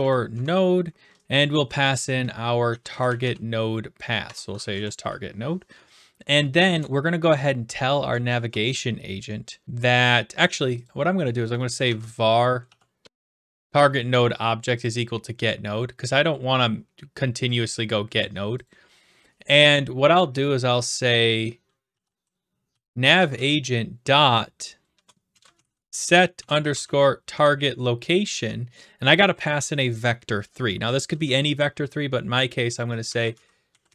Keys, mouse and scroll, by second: 0.0-0.4 typing, 2.4-3.7 typing, 4.2 Tab, 4.9 Right, 6.7 Return, 10.9-11.9 drag, 11.4-13.7 typing, 14.8-15.9 drag, 18.2-19.7 drag, 21.6-23.8 typing, 24.9-27.3 typing, 32.8-33.9 typing.